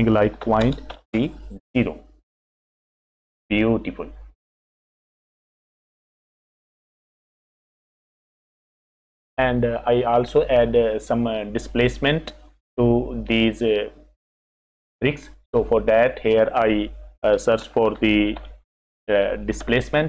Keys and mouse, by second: 5.3 click, 6.2 click, 6.4 click, 7.5 middle click, 8.8 F6, 15.6 click, 17.6 shift+a.